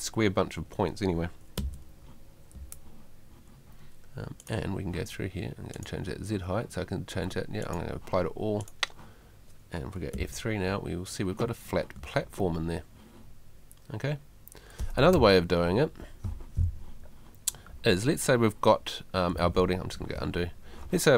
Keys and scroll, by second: 1.6 F3, 10.1 F3, 12.0 F3.